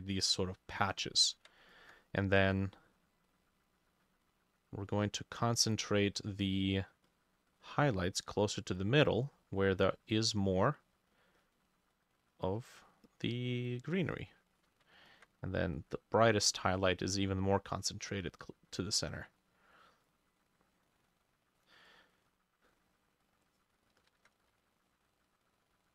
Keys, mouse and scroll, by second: 1.8 ctrl+click, 6.8-13.6 drag, 14.9-17.1 ctrl+drag, 18.3 double click, 20.4 double click, 24.2 ctrl+z, 24.5 shift+click, 25.3 double click.